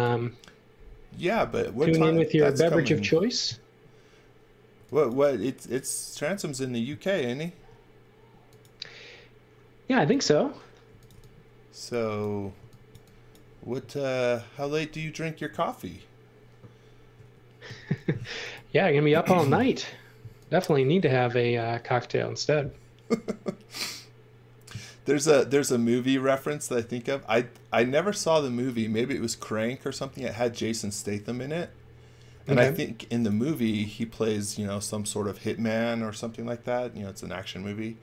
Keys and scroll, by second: 4.7 x, 7.5 m, 10.6-12.9 typing, 17.1 space, 19.3 x, 32.3-34.1 typing.